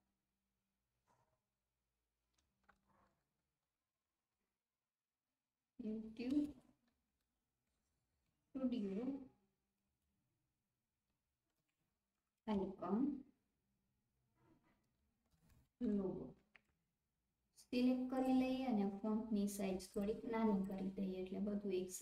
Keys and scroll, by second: 2.7-4.3 typing, 7.1-8.3 typing, 11.2-12.4 typing, 15.0-16.7 typing.